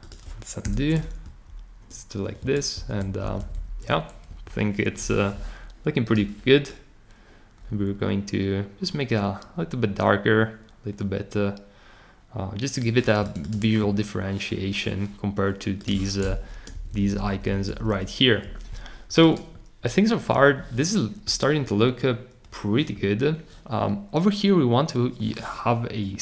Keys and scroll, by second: 0.6 super+k, 1.2 shift+Up, 2.4 Return, 2.7 Right, 3.0 Down, 3.2 Down, 3.4 Down, 3.5 Down, 4.3 Down, 16.5 Up, 16.7 Up, 16.9 Up, 17.0 Up, 17.2 Up, 17.3 Up, 17.4 Up, 17.7 Down, 17.9 Down.